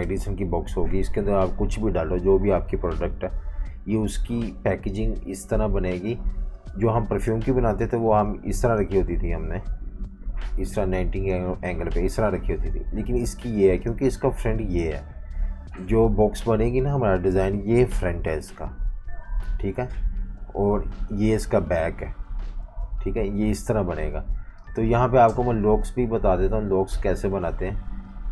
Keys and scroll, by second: 9.5 super+z, 12.5 super+z, 23.3 v, 24.4 v, 24.6 space.